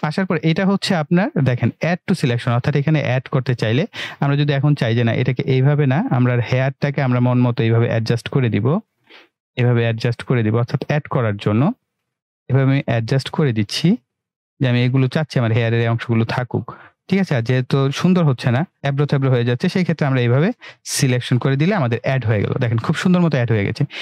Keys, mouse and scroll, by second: 18.8-21.6 click.